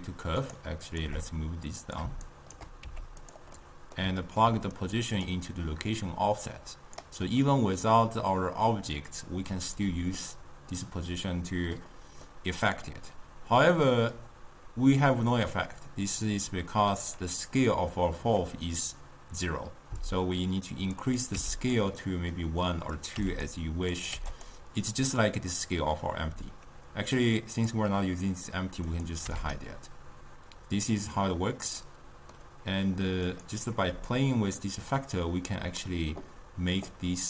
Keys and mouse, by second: 0.9 click, 1.1 g, 2.3 shift+right click, 2.9 g, 3.6-4.8 middle drag, 4.8 click, 5.9-7.5 drag, 7.5-10.5 middle drag, 11.3-16.8 middle drag, 20.1-21.8 drag, 22.1 middle click, 23.0 click, 24.0 click, 27.5 click, 28.9 click, 31.8-33.3 middle drag, 33.3 drag, 34.1-37.2 shift+drag.